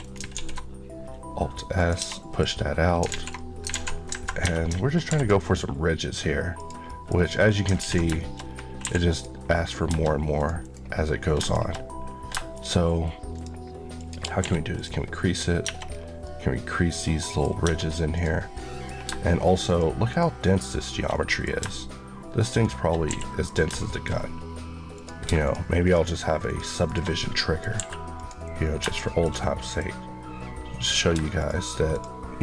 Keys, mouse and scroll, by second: 0.2 alt+s, 1.6 click, 1.8 Tab, 2.0 middle click, 2.4-3.0 scroll down 2, 3.0 alt+z, 3.2 middle click, 3.6 alt+z, 4.3 ctrl+Tab, 5.0 ctrl+r, 5.3 click, 6.7 middle click, 7.0 scroll up 1, 7.6 ctrl+scroll up 1, 7.7 ctrl+z, 8.1 shift+middle click, 8.3-8.7 scroll up 1, 8.7 2, 9.0 click, 10.2 click, 13.2 shift+click, 14.3 q, 14.6 click, 15.5 Tab, 16.1 middle click, 17.4 scroll up 1, 18.0 click, 18.4 middle click, 19.5 shift+click, 20.5 shift+click, 21.0 shift+middle click, 22.3 shift+click, 23.0 q, 23.3 click, 23.7 shift+middle click, 24.0-24.8 shift+scroll, 26.3 shift+click, 27.1 middle click, 27.6 q, 28.0 click, 28.5 scroll down 2, 28.8 shift+middle click, 29.2 scroll up 1, 29.5 middle click, 29.8 scroll up 1, 30.7 click, 31.2 shift+click, 31.8 shift+Left, 32.3 Left.